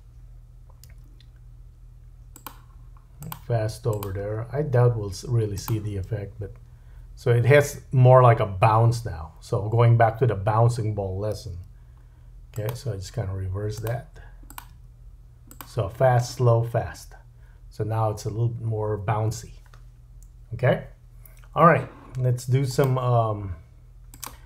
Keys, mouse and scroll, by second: 0.9 g, 3.9 click, 4.2 g, 5.9 space, 9.2-13.2 right drag, 11.5 g, 13.8 click, 14.5 click, 14.7 g, 16.5 click, 20.6-22.7 right drag, 22.7-24.4 drag.